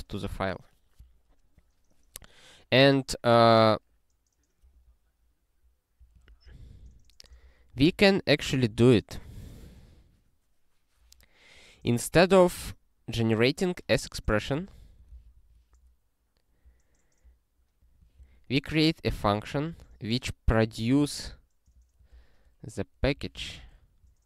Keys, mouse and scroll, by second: 6.0 click, 6.4 ctrl+space, 6.6 ctrl+p, 6.8 ctrl+p, 7.3 ctrl+p, 7.7 ctrl+w, 8.5 ctrl+s, 12.4 scroll up 1, 14.2 click, 14.5 ctrl+a, 15.1 ctrl+alt+k, 15.3 ctrl+/, 15.9 scroll down 1, 17.8 click, 18.2 ctrl+y, 19.5 Return, 20.0 scroll up 1, 21.6 click, 23.0 ctrl+b, 23.4 ctrl+alt+BackSpace.